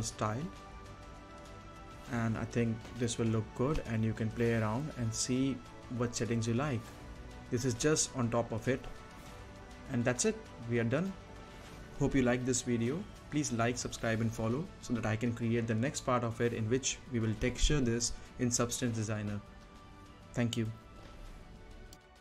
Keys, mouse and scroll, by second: 0.2 scroll up 1, 0.4 middle click, 0.5 scroll down 1, 1.0 middle click, 1.4 click, 1.7 Left, 2.5 space, 3.8-4.6 scroll up 1, 4.6 middle click, 5.4-7.8 drag, 7.8 right click, 8.4-10.7 drag, 10.8 click, 11.0 right click, 11.4 scroll up 1, 12.0 right click, 12.4 scroll down 1, 12.7 middle click, 13.2-13.6 scroll up 1, 13.6 space, 15.3 space, 15.4-17.5 right drag, 17.5-17.9 scroll down 1, 17.9-21.3 right drag, 21.3-21.7 scroll up 1, 21.7 right click.